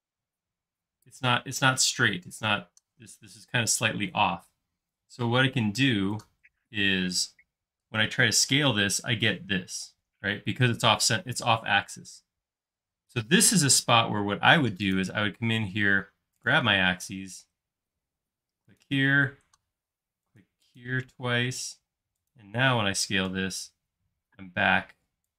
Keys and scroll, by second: 8.5 s, 22.0 space, 23.3 typing.